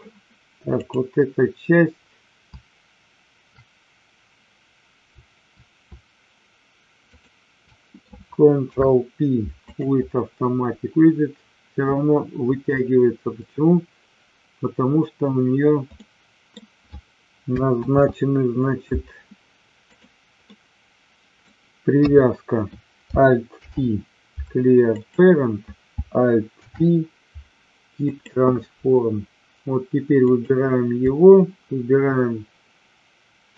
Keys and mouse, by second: 0.7 click, 7.0 shift+click, 8.5 ctrl+p, 16.0 middle click, 18.0 ctrl+z, 19.9 click, 20.3-21.3 middle drag, 22.0 KP_3, 23.5 alt+p, 26.5 alt+p, 30.2 click.